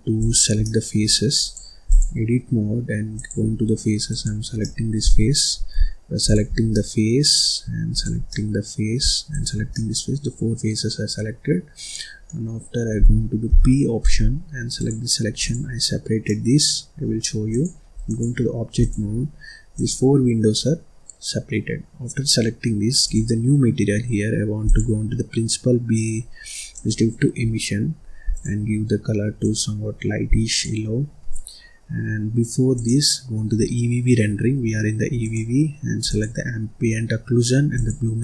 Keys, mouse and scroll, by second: 0.1 click, 0.6 middle click, 1.4-3.2 drag, 3.5-4.0 scroll up 3, 4.0 click, 4.6-6.2 middle drag, 6.2 shift+click, 6.7 middle click, 7.3-7.9 scroll up 2, 7.9 shift+click, 8.2 middle click, 8.9-9.3 scroll up 1, 9.3 shift+click, 9.6-13.4 middle drag, 13.4 p, 15.3 click, 15.8-16.2 scroll up 1, 16.2-17.4 middle drag, 17.4-18.8 drag, 19.1-19.7 scroll up 2, 19.7 click, 20.2 scroll down 1, 20.4-23.0 middle drag, 23.0-27.6 drag, 28.3 click, 32.7 click, 35.2 click, 36.8-37.7 scroll down 4, 37.7 click.